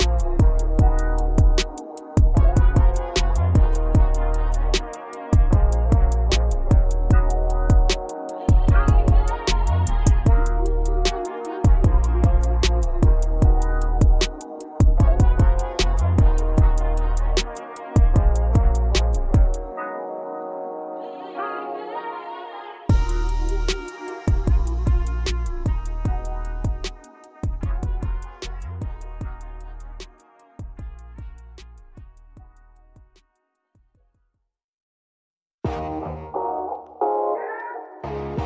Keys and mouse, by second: 0.0 KP_2, 1.1 KP_Subtract, 1.4 KP_Subtract, 3.0 KP_Subtract, 3.0 KP_8, 4.0 KP_8, 4.8 KP_4, 10.7 click, 18.9 right click, 23.0 x, 28.4 click, 32.6 right click, 35.5 x, 37.1 click.